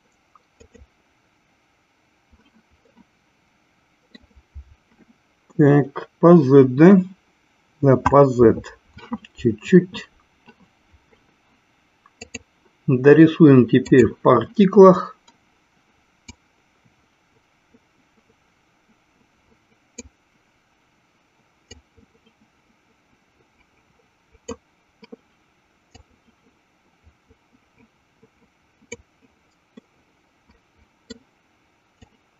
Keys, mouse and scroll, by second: 1.3 click, 3.4-4.6 middle drag, 12.2-14.6 drag, 16.8-20.7 drag, 22.2-24.9 drag, 26.3-29.2 drag, 30.0-31.3 middle drag.